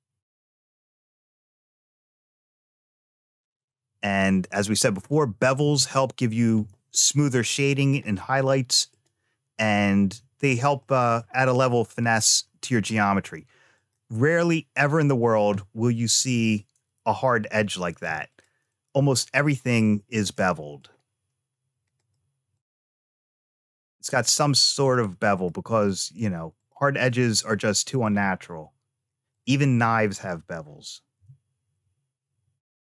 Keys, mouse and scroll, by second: 8.0 middle click, 10.6 middle click, 11.5-12.0 scroll up 1, 12.0 middle click, 13.6 click, 16.0 Tab, 17.9 2, 18.1 click, 19.0 middle click, 20.2 middle click, 21.8 shift+click, 22.4 shift+click, 24.0 shift+click, 24.7 shift+click, 25.2 shift+click, 25.7 shift+click, 26.4 shift+click, 27.0 middle click, 29.2 shift+click, 30.7 ctrl+b.